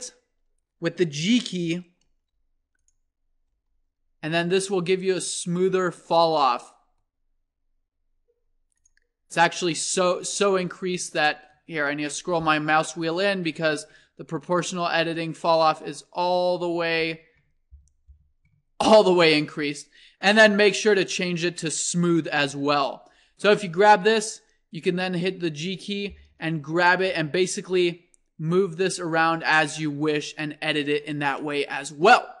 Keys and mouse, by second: 7.6-10.4 drag, 10.0 c, 10.6-15.0 drag, 19.8-22.9 drag, 21.0-21.5 right drag, 30.1 middle click, 30.4 click, 30.9 Tab, 31.5-32.4 middle drag.